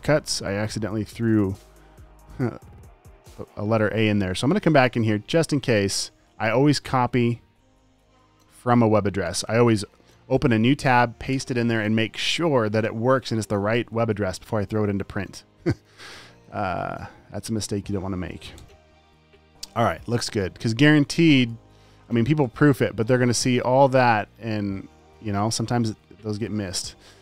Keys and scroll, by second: 0.9 space, 2.6 super+space, 9.7 super+c, 10.7 super+t, 11.4 super+v, 11.7 Return, 14.6 super+w, 17.1 super+a, 17.5 super+v, 21.5 space.